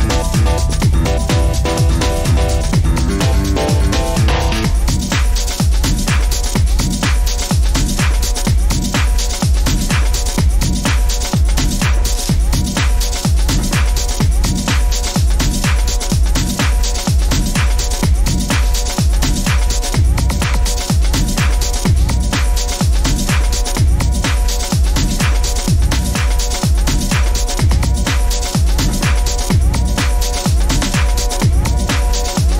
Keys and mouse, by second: 1.0 middle click, 1.8 ctrl+z, 3.0 ctrl+r, 10.3-11.4 middle drag, 12.2 ctrl+z, 13.7 ctrl+r, 21.4 ctrl+r, 25.2 ctrl+r, 31.2 ctrl+r.